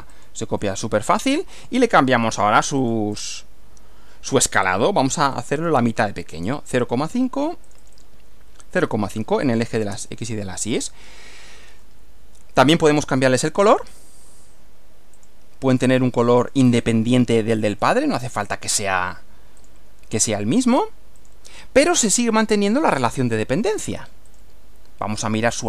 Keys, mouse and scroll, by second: 0.1 click, 1.6 click, 2.6 click, 4.5-5.6 typing, 6.3 Return, 7.6 click, 8.5-9.7 typing, 9.9 Return, 11.8-12.8 middle drag, 13.4 click, 13.9 right click, 15.2 click, 16.4 click, 17.8 click, 18.4 click, 19.6 click, 21.2 click, 22.2-23.2 middle drag, 24.3 click.